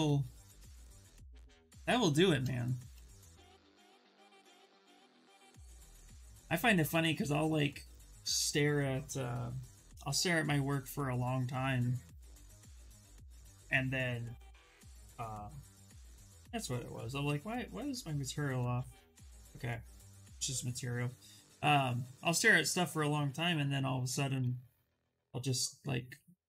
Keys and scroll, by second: 23.5 s.